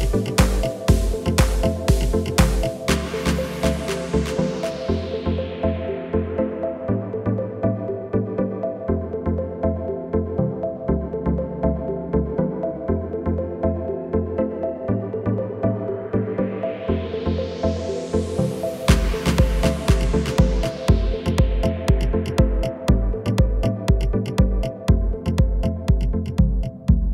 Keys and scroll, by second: 0.3 a, 3.4 e, 12.0 g, 14.4 Tab.